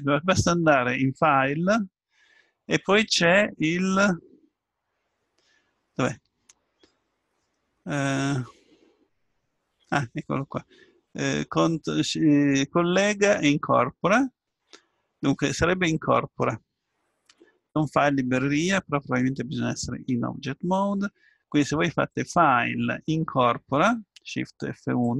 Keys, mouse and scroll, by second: 20.0 Tab, 22.1-23.9 drag.